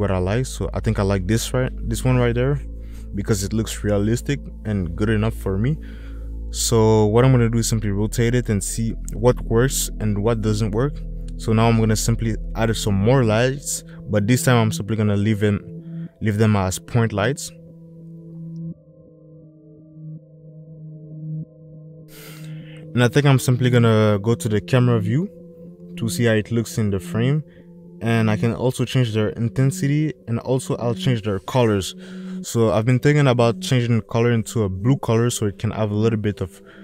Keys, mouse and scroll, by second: 1.2 middle click, 1.3 click, 2.6 click, 8.4 click, 9.7 middle click, 12.5 click, 13.2 shift+a, 20.2 middle click, 24.9 middle click, 26.9 click, 29.2-32.4 drag.